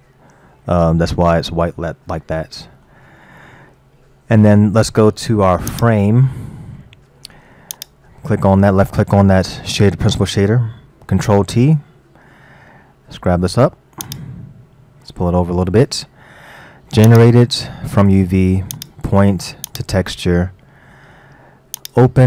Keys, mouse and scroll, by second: 0.6-5.7 middle drag, 5.7 click, 6.5-7.0 scroll up 4, 7.8 click, 11.8 ctrl+t, 13.1 g, 15.0-17.1 middle drag, 17.1 click, 18.7-20.7 drag, 20.7-21.8 middle drag, 21.8 click.